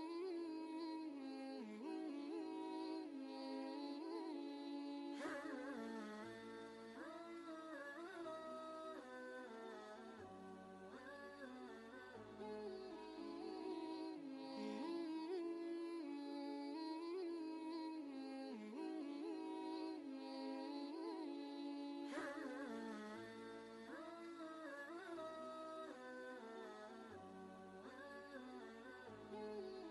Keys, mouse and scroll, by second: 0.6 v, 1.0 click, 1.4 ctrl+space, 1.6 ctrl+click, 2.0 space, 2.2 click, 2.6 space, 4.1 click, 9.1 click, 9.2 click, 12.0 ctrl+space, 12.2 ctrl+click, 12.7 space, 12.8 click, 13.2 space, 13.9 ctrl+space, 14.1 ctrl+click, 15.3 space, 16.1 click, 16.5 space, 17.1 click, 17.5 space, 21.5-26.1 drag, 25.9-29.9 typing.